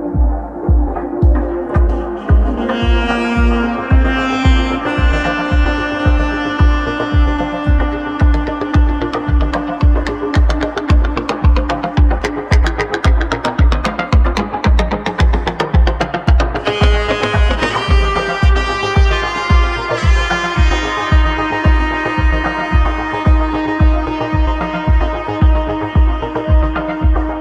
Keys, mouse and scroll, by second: 0.5 s, 3.1 e, 6.0 e, 7.7 s, 12.2 g, 19.8 f, 20.5-20.9 scroll down 1, 20.9-22.1 middle drag, 22.1-23.0 scroll down 2, 23.0 `, 23.7-24.2 scroll down 1, 24.2 shift+middle click, 24.9 click, 25.3 click, 25.7 shift+middle click, 26.1-26.5 scroll down 3, 27.0-27.4 shift+middle drag.